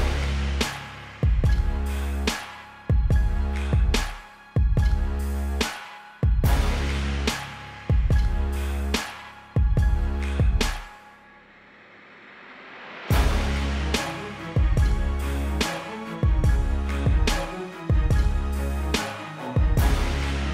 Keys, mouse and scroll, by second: 0.7 shift+click, 2.1 ctrl+l, 2.8 click, 6.1 Return, 7.1 click, 9.9 click, 12.1 click, 12.9-13.7 typing, 13.1 Tab, 13.8 Tab, 14.5 Escape, 15.3 Tab, 15.5 KP_2, 15.7 KP_5, 15.9 Tab, 16.7 KP_2, 16.9 KP_5, 17.0 Tab, 19.0 click.